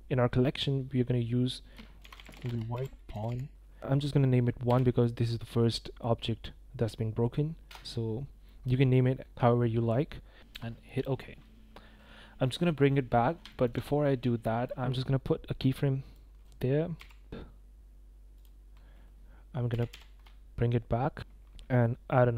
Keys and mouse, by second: 0.0-11.6 drag, 11.9 click, 13.5 shift+drag, 14.7 click, 14.8 i, 16.1 drag, 16.9 g, 19.7 g, 19.9 y, 21.2 g, 21.9 i.